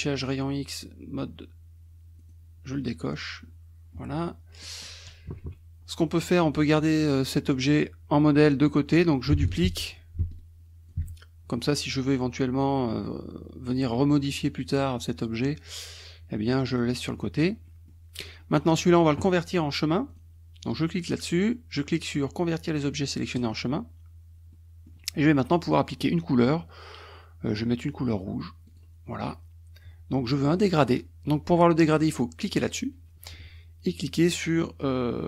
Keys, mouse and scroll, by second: 2.2 click, 4.6 middle click, 5.3 KP_Subtract, 6.5 click, 9.5 ctrl+d, 9.8-11.1 ctrl+drag, 11.1-11.6 ctrl+scroll up 1, 12.7 click, 16.7 click, 17.1 middle click, 17.1-17.7 scroll up 2, 17.5 middle click, 18.5 click, 20.1 click, 23.4 click, 24.5 middle click, 28.7 click, 32.5 click.